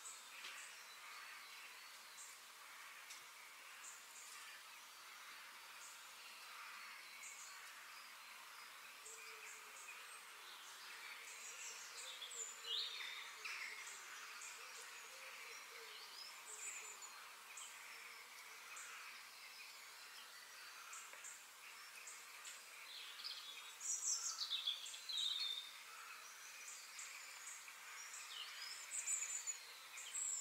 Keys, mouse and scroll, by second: 1.5 middle click, 2.0-2.5 scroll up 2, 2.5-4.3 middle drag, 13.0-14.8 middle drag, 16.8-18.8 middle drag, 18.9 scroll down 1, 19.2-20.4 middle drag, 20.4-21.0 scroll up 2, 21.0-22.5 shift+middle drag, 22.5-22.8 scroll down 2, 22.8-24.7 middle drag, 25.5-26.4 middle drag, 26.4 f, 29.3-30.4 middle drag.